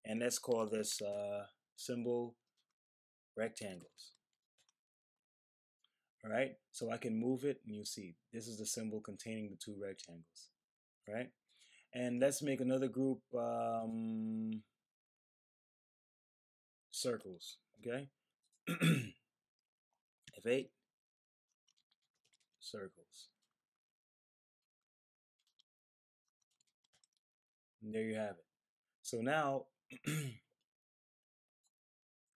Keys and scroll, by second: 0.2-2.0 typing, 3.2-4.7 typing, 4.5 Return, 20.2 F8, 21.2-22.9 typing, 25.4-27.3 typing.